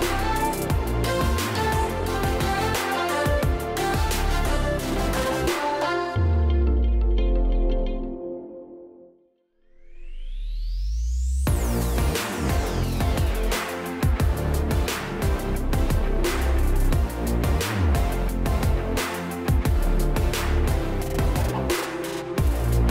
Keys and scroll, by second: 6.3 a, 6.8 space, 8.1-12.8 typing, 14.1-15.0 typing.